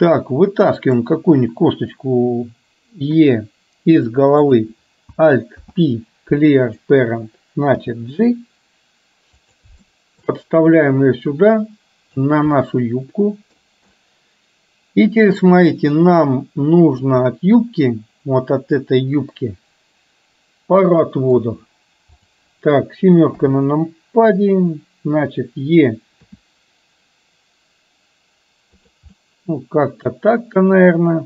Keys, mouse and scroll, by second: 1.0 click, 3.3 e, 4.5 click, 5.8 alt+p, 7.9 g, 10.0 shift+middle click, 10.9-12.3 drag, 12.8 middle click, 13.9-17.1 middle drag, 18.0-21.4 middle drag, 22.3 click, 23.4 KP_7, 26.4 e, 29.3-31.2 middle drag.